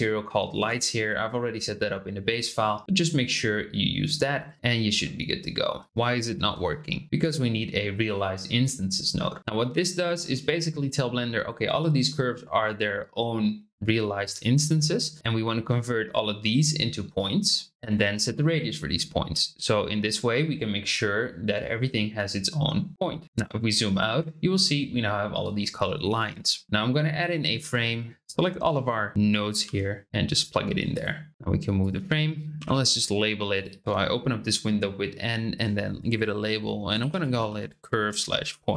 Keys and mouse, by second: 3.4-4.9 middle drag, 5.1 shift+click, 7.0 g, 7.0 shift+a, 14.7-16.0 drag, 17.2-18.4 drag, 23.3 click, 26.6 shift+a, 27.8-28.7 drag, 29.6 g, 31.3 g, 32.5 n, 33.5-38.7 drag.